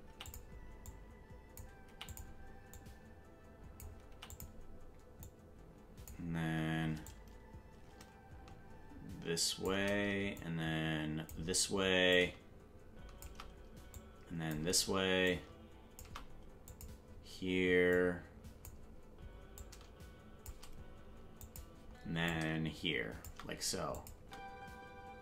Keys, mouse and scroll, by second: 0.1 i, 0.9 click, 2.7 click, 3.5 click, 5.2-6.1 drag, 7.1-9.7 drag, 10.4 click, 12.1 click, 13.9 click, 15.2 click, 16.7 click, 17.9 click, 19.5 click, 21.4 click, 22.3-23.3 drag, 23.9 click, 24.1 space.